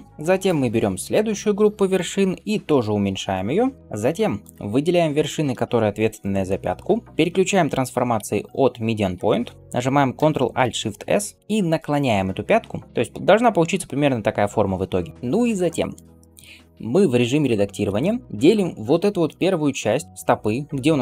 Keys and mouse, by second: 0.1 middle click, 0.4-3.8 drag, 2.6 s, 3.8-10.5 middle drag, 4.3-10.5 drag, 11.2 ctrl+alt+shift+s, 11.4-21.0 drag, 11.4-15.1 middle drag, 12.9-15.1 right drag, 12.9 d, 17.4 Tab, 18.8-21.0 middle drag.